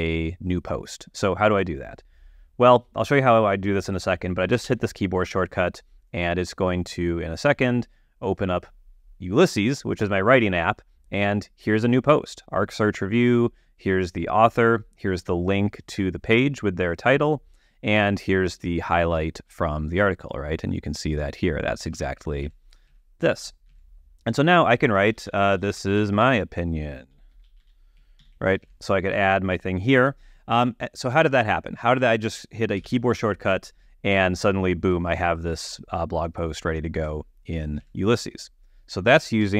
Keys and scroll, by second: 5.0 ctrl+alt+super+u, 22.3 super+Tab, 25.2-28.5 typing, 28.6 alt+;, 29.0 alt+super+Tab, 29.5 super+Tab, 33.3 ctrl+alt+super+u, 38.2 super+Tab.